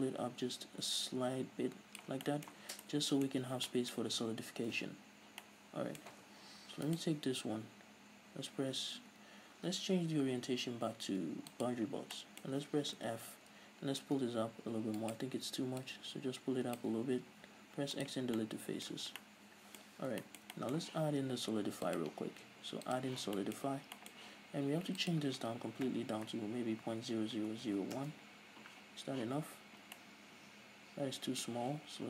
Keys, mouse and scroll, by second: 0.9-2.3 drag, 2.3-6.9 middle drag, 2.6 Tab, 2.7 scroll down 2, 3.4-3.7 scroll up 2, 4.9 ctrl+s, 6.3-6.9 scroll up 2, 6.9 alt+right click, 10.4 ., 12.2-15.0 middle drag, 13.1 f, 15.0 click, 15.2 shift+right click, 15.9-18.4 drag, 18.4 x, 18.4-22.0 middle drag, 19.2-19.7 scroll down 2, 19.9-20.3 scroll up 2, 22.0-23.4 drag, 23.4-25.1 shift+middle drag, 25.1-30.0 drag, 28.8 Return, 29.3 z, 30.0-32.0 middle drag.